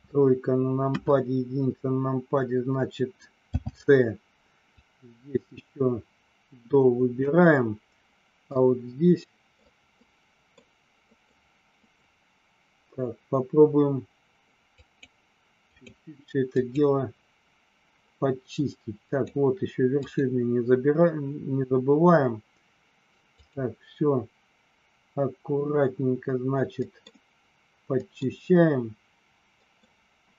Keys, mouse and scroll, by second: 0.9 KP_1, 3.5 c, 8.5-9.5 middle drag, 10.0 middle click, 11.1 middle click, 11.7 middle click, 14.9 click, 15.7 click, 16.5 click, 19.0 click, 20.0 click, 23.3 click, 26.9 middle click, 28.0 middle click, 29.6 middle click.